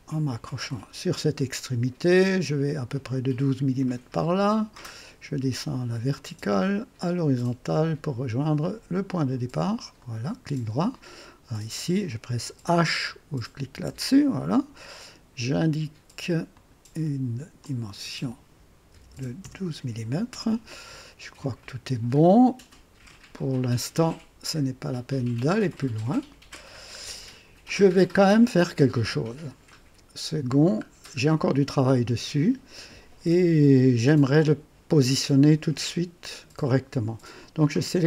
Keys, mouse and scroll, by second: 0.6 click, 3.8 click, 6.1 click, 9.1 click, 10.0 right click, 10.8 right click, 11.8 click, 13.7 h, 14.5 scroll up 1, 16.5 click, 17.6 click, 18.9 KP_1, 18.9 KP_1, 19.1 KP_2, 19.4 Return, 25.7 click, 27.0-27.4 scroll down 2, 27.7-28.9 drag, 29.7-30.4 right drag, 30.8 scroll up 2.